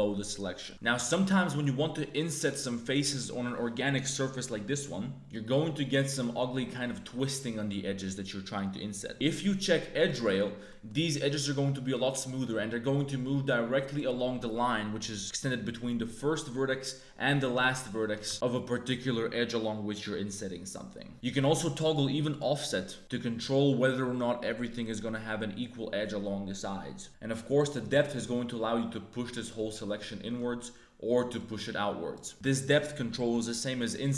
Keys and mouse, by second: 0.7 a, 0.7 shift+w, 1.0 i, 5.3 click, 6.1 click, 9.9 click, 10.6 middle click, 12.0 middle click, 18.0 2, 18.3 i, 19.6-21.1 middle drag, 21.3 click, 21.8 click, 22.3 click, 27.2-29.4 drag, 29.7 middle click, 31.4 click, 32.3 a, 32.3 shift+w, 32.3 3, 33.9 i.